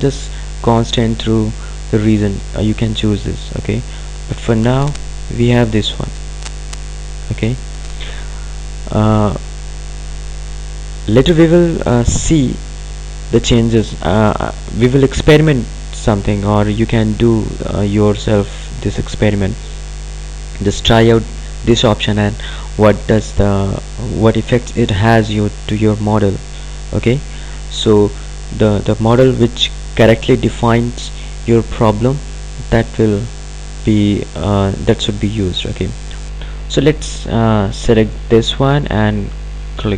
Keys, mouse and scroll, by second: 4.4 click.